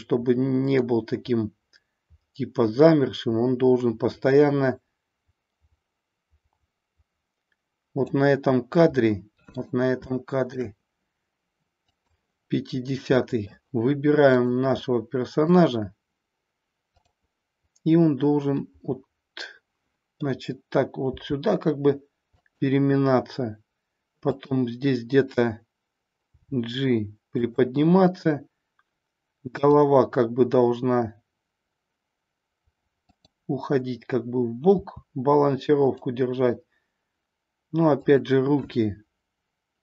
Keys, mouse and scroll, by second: 9.0-9.7 middle drag, 10.0-10.6 shift+middle drag, 11.9 click, 13.3 middle click, 14.4 click, 14.9 middle click, 18.6-20.2 middle drag, 21.0 r, 22.4 click, 24.4-25.5 drag, 26.4 g, 27.5 drag, 29.5-30.8 drag, 33.1-34.3 drag, 34.7 r, 36.0 click.